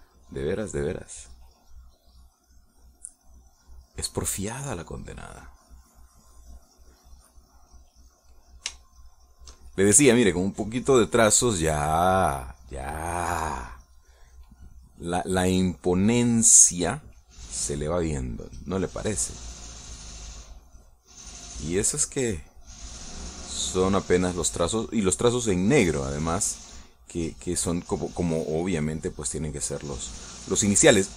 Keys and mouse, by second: 1.0-5.2 drag, 5.6-9.1 drag, 9.2-11.0 middle drag, 11.2 shift+middle click, 11.9 shift+middle click, 13.4-14.4 shift+middle drag, 18.4 click, 19.4-25.0 drag, 25.8 middle click, 28.7-31.1 drag.